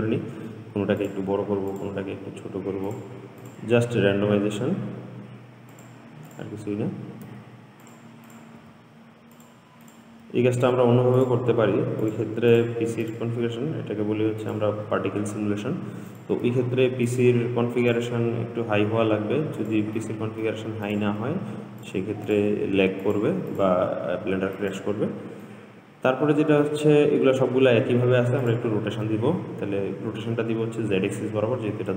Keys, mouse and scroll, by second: 0.5 s, 2.0 click, 2.3 s, 3.7 click, 4.2 s, 6.5 click, 7.5 s, 8.5 click, 8.8 s, 10.1 click, 10.4 s, 11.4 click, 11.7 s, 12.7 click, 13.3 click, 13.7 s, 16.3 click, 16.7 s, 18.0 click, 18.4 s, 20.2-21.1 middle drag, 21.1 click, 21.3 s, 22.5 click, 22.8 s, 23.7 click, 24.0 s, 25.7-28.7 middle drag, 28.7 click.